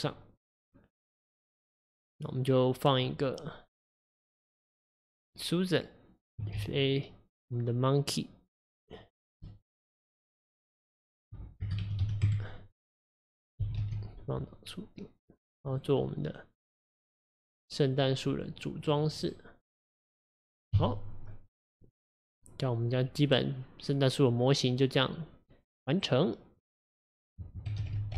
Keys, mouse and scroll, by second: 4.6 click, 6.6 shift+a, 11.3-13.7 drag, 13.7 g, 15.8 drag, 16.1-17.4 middle drag, 17.4 right click, 18.4 click, 18.9 click, 19.3 right click, 20.1 click, 20.8 KP_1, 21.8 click, 22.1 click, 27.9 ctrl+s.